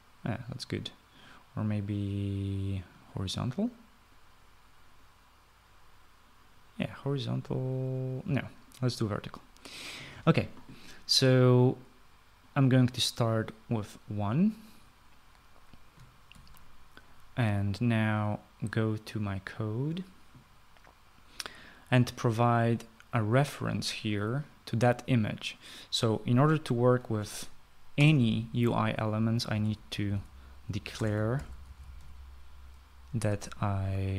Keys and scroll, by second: 17.3 ctrl+s, 28.9 Return, 30.2-33.4 typing.